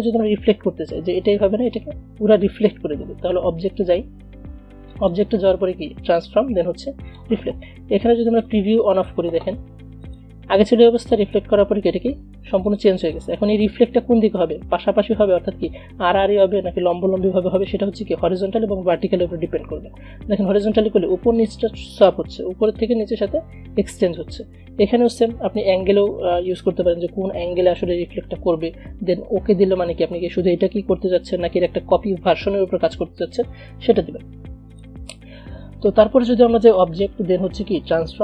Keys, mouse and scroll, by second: 5.0-10.1 drag, 17.6 click, 20.6 click, 34.8-38.2 drag.